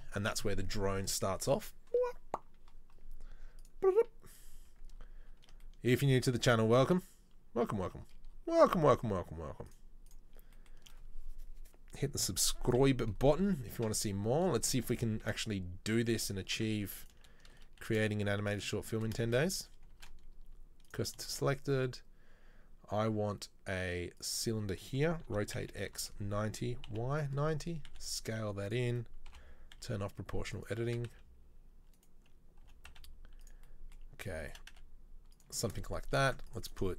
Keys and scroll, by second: 12.9 KP_3, 13.3 KP_1, 13.9 KP_3, 15.3 shift+a, 16.6 Tab, 17.9 shift+s, 19.4 shift+a, 20.1 shift+s, 21.3 shift+a, 25.4 r, 28.0 s, 29.4 o, 29.8 s, 31.0 s, 32.7 g, 34.7 s, 36.3 ctrl+r.